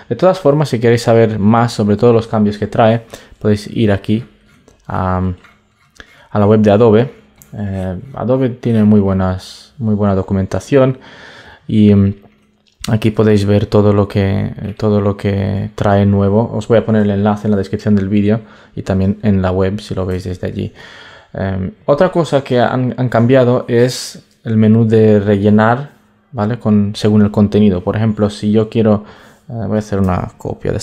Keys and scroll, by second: 20.0 super+Tab, 30.6 super+j.